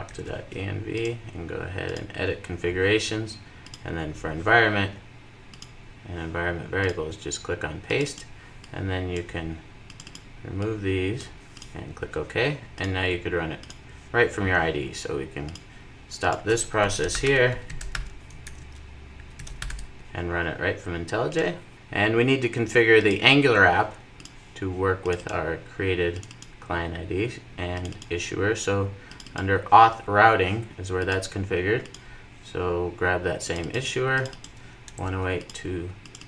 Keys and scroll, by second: 0.1 super+c, 21.4 ctrl+r, 24.2 ctrl+r.